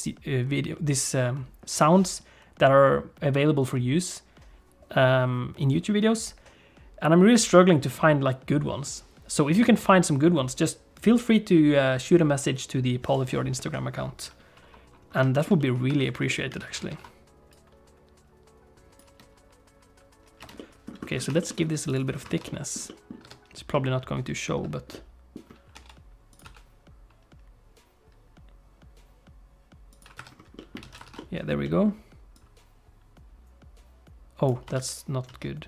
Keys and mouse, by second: 15.3 shift+middle click, 15.6 middle click, 15.9 Tab, 16.2 middle click, 16.6 alt+a, 16.9 ctrl+s, 17.5-19.0 drag, 19.0 space, 20.4 space, 20.6 middle click, 21.4 shift+middle click, 21.5 middle click, 21.9 click, 22.4 middle click, 22.5 click, 22.8 click, 23.2 Tab, 23.7 click, 24.9 click, 25.7 e, 26.4 s, 30.2 Tab, 30.5 middle click, 30.8 alt+a, 31.1 ctrl+s, 31.1 middle click, 31.6 middle click, 32.3-34.5 drag, 34.8 ctrl+z, 35.4 ctrl+z.